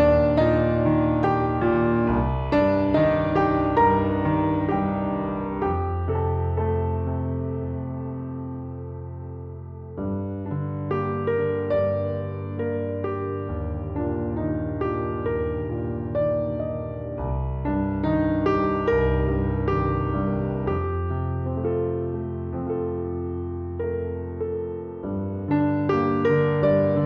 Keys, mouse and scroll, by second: 1.4 click, 3.8 space, 5.9 space, 5.9 click, 6.8 click, 7.6-8.0 drag, 7.6-8.0 right drag, 8.1 drag, 8.1 right drag, 10.7 space, 12.2 click, 12.2-27.0 right drag, 13.2 space, 16.4 click, 18.2-23.1 drag, 19.1 space, 20.2-23.1 middle drag, 21.1 space, 24.3-27.0 drag.